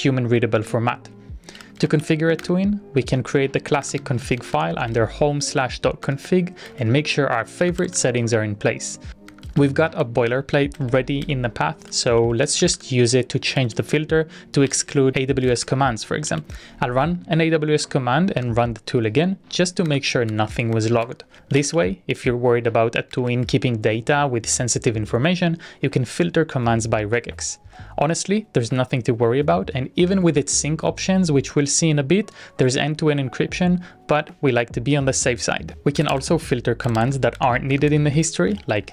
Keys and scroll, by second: 1.1-16.8 typing, 2.6 Return, 18.3 Up, 19.9 Up, 20.3 Down, 20.7 Up, 21.1 Down, 21.3-22.2 typing, 23.5 BackSpace, 35.7-38.9 typing.